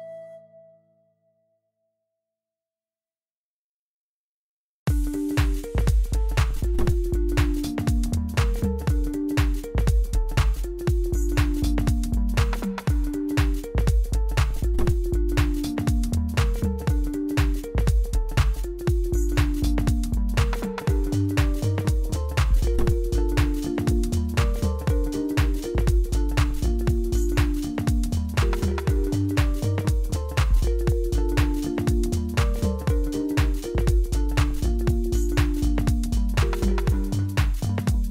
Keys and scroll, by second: 0.1 m, 1.1 Tab, 2.6 g, 7.5 Tab, 8.4 3, 9.8 g, 11.6 3, 12.1 shift+z, 14.7 1, 16.6 g, 19.6 shift+z, 31.9 1, 36.8 shift+z.